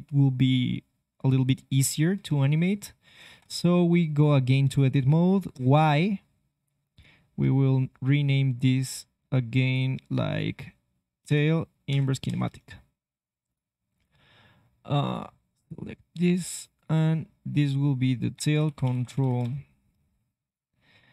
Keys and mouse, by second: 2.3 ctrl+Tab, 3.3 ctrl+Tab, 4.1-6.6 right drag, 5.5 y, 6.9-13.4 right drag, 13.9-19.5 drag, 20.4-21.1 drag.